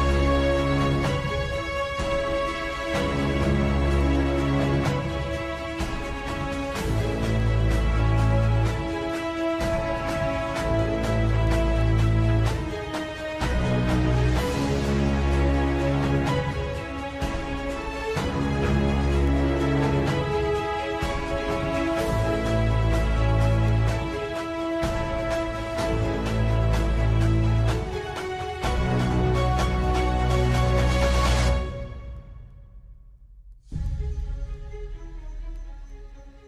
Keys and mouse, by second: 1.5 g, 5.9 KP_7, 7.9 g, 12.2 KP_3, 14.4 shift+middle click, 15.4 shift+d, 18.5 KP_3, 19.8 g, 25.3 middle click, 27.2-29.2 middle drag, 29.4 middle click, 30.5-32.3 middle drag, 32.7 middle click, 33.7-35.0 middle drag.